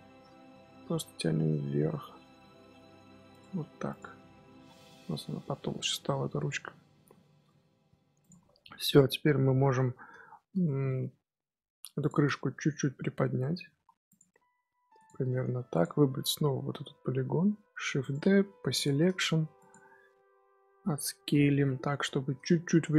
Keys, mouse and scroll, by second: 3.5 Tab, 3.7 scroll down 2, 3.8 click, 4.0-4.6 middle drag, 4.6 scroll down 1, 4.7-6.7 middle drag, 6.7 scroll up 1, 6.7 scroll down 1, 6.9 scroll up 1, 6.9 scroll down 1, 7.1-8.1 shift+middle drag, 8.1 click, 8.8 KP_3, 10.6-11.9 shift+middle drag, 11.9 shift+click, 12.3-12.7 middle drag, 12.7-13.1 scroll up 1, 13.1 middle click, 13.5 g, 14.2 middle click, 14.9 click, 15.1 scroll down 1, 15.3 Tab, 15.5 3, 15.6 click, 16.0-17.8 scroll up 2, 17.8 shift+d, 18.5 p, 19.1 Tab, 19.5 click, 20.0-20.5 middle drag, 20.5-20.8 scroll up 2, 20.8 Tab, 21.1 a, 21.9 KP_7.